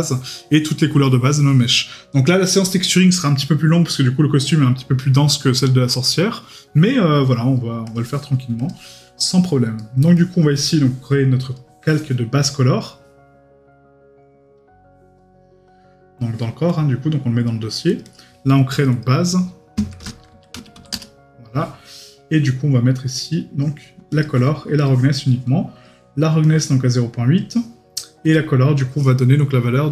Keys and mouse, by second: 9.8 right click, 10.1 middle click.